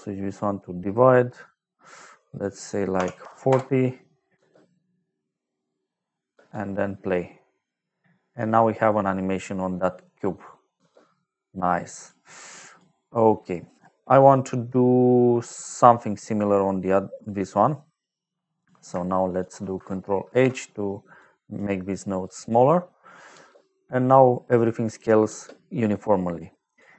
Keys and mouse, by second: 0.2 click, 2.9 KP_4, 3.1 KP_0, 3.4 Return, 4.2 space, 6.2 space, 10.7 space, 11.6 click, 12.4 click, 12.9 middle click, 15.4 click, 18.5 click, 19.2 shift+click, 20.2 ctrl+h, 21.1 click, 21.8 click, 22.7 middle click, 23.3 space, 25.2 space, 26.0 middle click, 26.7 click.